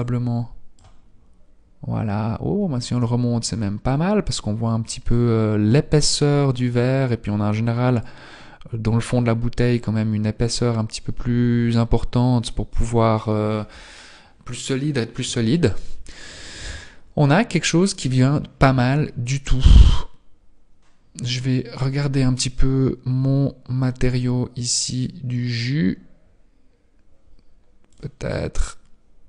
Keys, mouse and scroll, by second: 3.4 click, 7.2 click, 10.5-13.9 scroll down 2, 17.4-18.7 scroll down 4, 18.7 Tab, 18.9-19.3 scroll down 2, 19.7 right click, 21.1 right click, 21.8 scroll down 1.